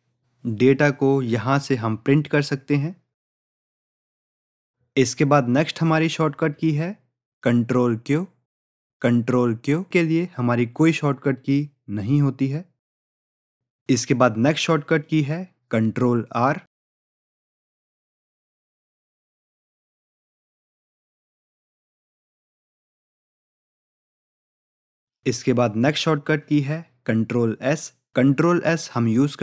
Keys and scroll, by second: 1.5 ctrl+p, 28.5 ctrl+s.